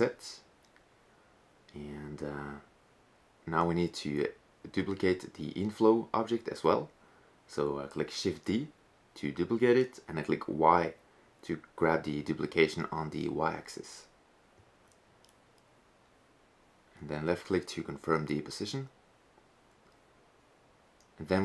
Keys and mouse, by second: 3.4-5.2 right drag, 5.8 KP_1, 6.5 KP_3, 10.8 shift+d, 15.2 g.